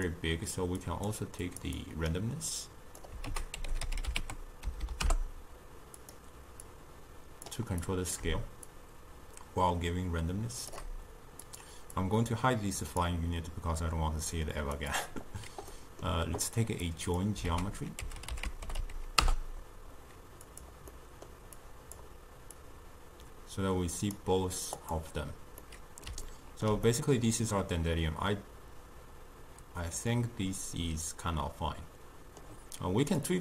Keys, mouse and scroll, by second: 0.9 drag, 1.8 click, 2.6 click, 3.3 ctrl+a, 4.9 Down, 6.7-8.4 drag, 8.8-11.6 shift+drag, 12.0 click, 14.8 click, 15.8-16.9 middle drag, 16.9 drag, 17.5 ctrl+a, 21.0-21.6 middle drag, 21.6 click, 22.6 click, 24.9 click, 25.7-30.0 middle drag, 33.3 click.